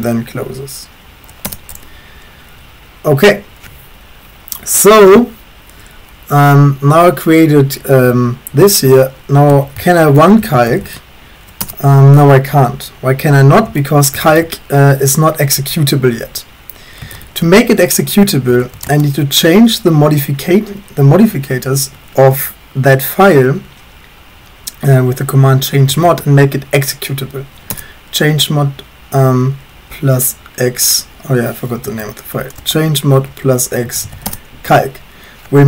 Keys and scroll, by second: 1.5 Return, 9.3-11.3 typing, 11.6 Return, 13.5-14.4 typing, 16.8-19.1 typing, 25.7-26.4 typing, 27.8 Return, 31.9 Up, 32.6-34.6 typing.